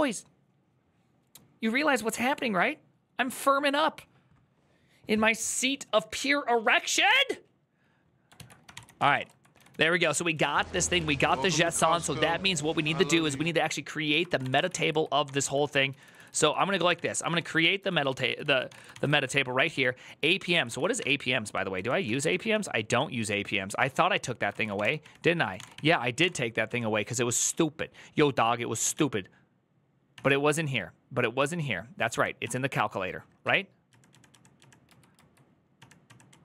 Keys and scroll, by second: 8.3 alt+{, 8.5 ctrl+c, 8.6-12.0 typing, 14.0 ctrl+c, 14.2 typing, 14.3 Return, 14.4 ctrl+u, 14.5 ctrl+u, 15.4-22.1 typing, 24.3-26.9 typing, 28.6 typing, 29.9 typing, 31.2 typing, 32.9-36.3 typing.